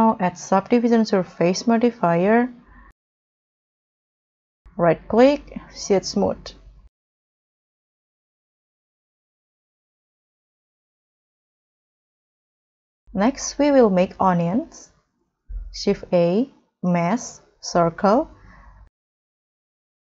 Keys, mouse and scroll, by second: 3.2 middle click, 3.4 middle click, 4.9 right click, 6.0 scroll down 2, 6.3 middle click, 6.7 scroll up 2, 7.1 middle click, 7.4-7.9 scroll down 5, 8.1 middle click, 9.3 scroll up 3, 9.6 middle click, 10.5 middle click, 10.6 middle click, 10.7 middle click, 12.2 scroll up 1, 12.6 middle click, 16.2 shift+a.